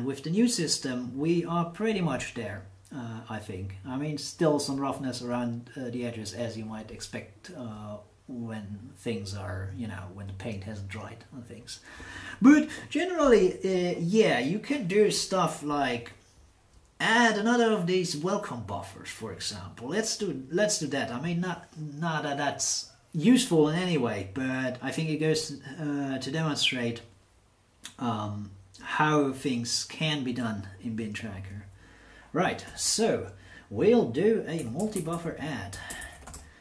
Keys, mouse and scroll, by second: 32.6 shift+8, 34.3-36.6 typing.